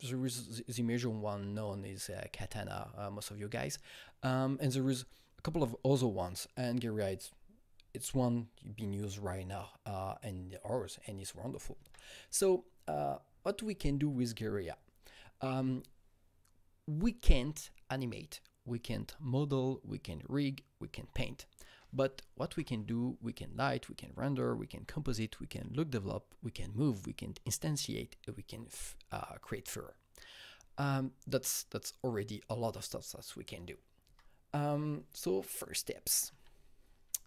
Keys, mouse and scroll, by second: 11.8 Right, 14.9 Right, 22.4 Right, 22.5 Right, 34.1 Right, 36.3 alt+Tab.